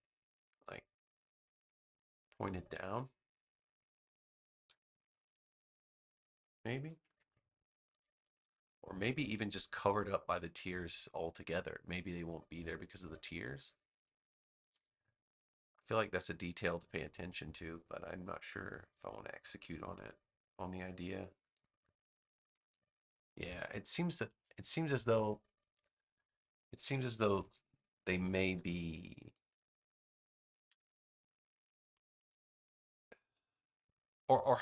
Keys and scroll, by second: 5.2 BackSpace, 28.4 BackSpace, 30.6 BackSpace.